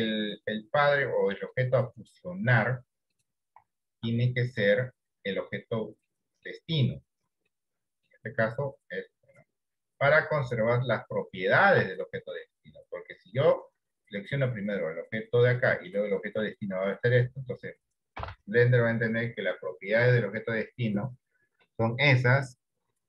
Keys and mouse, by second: 0.4-3.6 right drag, 4.4 middle click, 6.3 middle click, 7.6 middle click, 18.3 ctrl+j.